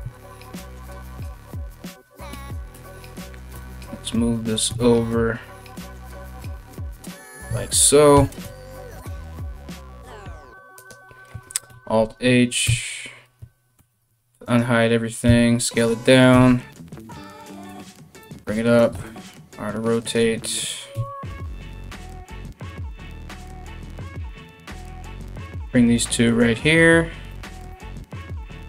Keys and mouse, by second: 0.3 a, 0.4 a, 1.9 l, 2.3 l, 3.1 g, 7.0 a, 7.7 g, 11.3 alt+h, 12.2 Tab, 13.4 alt+h, 14.0 right click, 14.8 s, 15.9 KP_3, 17.3 g, 18.5 r, 20.5 KP_1, 21.6-23.7 typing, 24.8 r, 27.3 g, 28.4-28.6 typing.